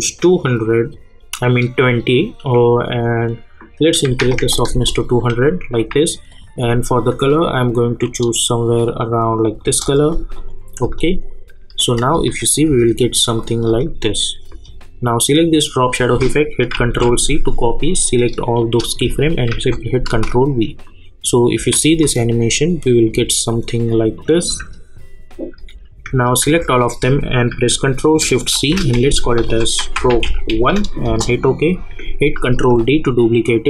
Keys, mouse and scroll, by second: 1.6 click, 3.8 click, 4.7 Return, 6.3-9.6 drag, 9.6 Return, 10.3 click, 10.8 space, 13.4 click, 13.7 space, 15.7 click, 16.7 ctrl+c, 18.0 click, 19.5 ctrl+v, 20.1 space, 23.5 click, 24.4 space, 26.4 ctrl+a, 28.5 ctrl+shift+c, 29.2-31.0 typing, 31.0 Return, 32.4 ctrl+d.